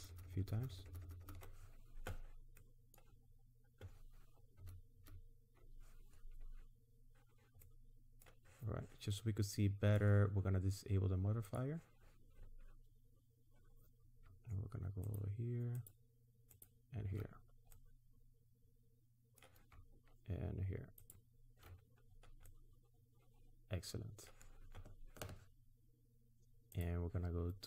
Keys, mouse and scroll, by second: 0.0 ctrl+KP_Add, 1.1 ctrl+KP_Add, 2.6 middle click, 3.2-4.0 scroll up 3, 4.6 ctrl+KP_Add, 5.0 ctrl+KP_Add, 6.8 scroll up 1, 7.6 middle click, 9.2 middle click, 11.5 click, 13.5 scroll up 1, 15.1 alt+shift+click, 17.4-17.7 scroll down 1, 17.7 middle click, 21.0 alt+shift+click, 22.0-22.4 scroll down 3, 22.5 middle click, 26.8 click.